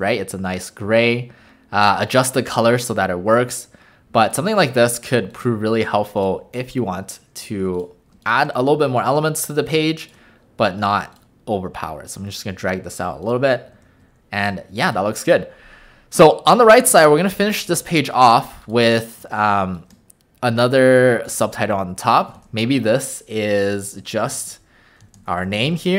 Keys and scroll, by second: 17.7 alt+space, 19.2 w, 22.4 ctrl+a, 24.1-25.7 typing.